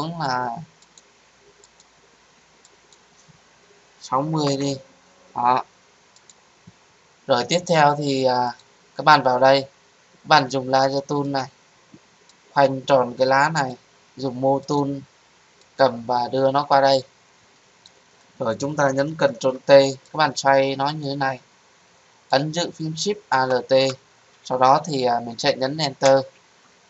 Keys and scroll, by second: 19.3 ctrl+t, 26.0 Return.